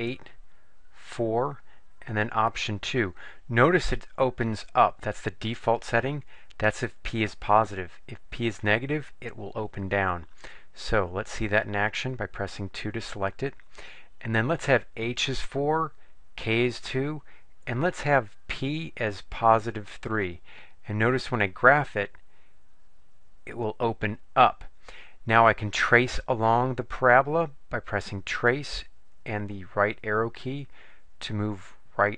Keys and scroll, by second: 0.1 8, 1.7 4, 12.6 2, 17.9 Down, 18.7 Down, 19.9 3, 29.9 Right, 30.7 Right, 31.4 Right.